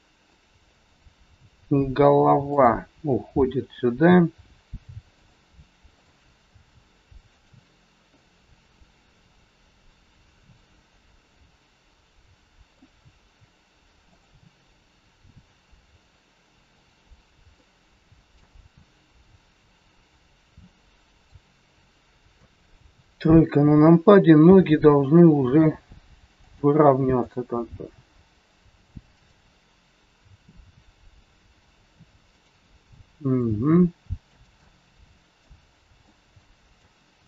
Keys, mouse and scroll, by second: 2.5 click, 3.1 r, 5.9 click, 6.5 r, 8.1 middle click, 14.0 click, 14.8 r, 17.5 middle click, 19.1 scroll down 1, 21.1 click, 22.3 KP_3, 24.4 g, 27.3 click, 27.7 g, 29.6 scroll down 1, 30.6 r, 34.3 g, 34.5 middle click, 36.1 middle click, 37.1 g.